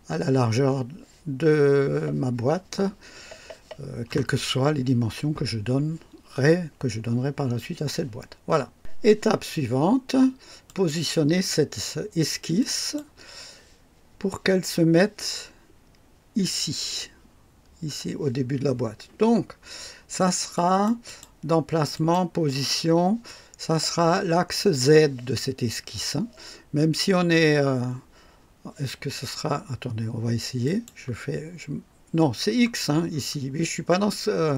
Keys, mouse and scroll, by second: 10.6 click, 12.5 click, 20.5 click, 21.9 click, 30.6 click, 31.3-33.3 scroll down 5, 34.0-34.5 scroll down 17.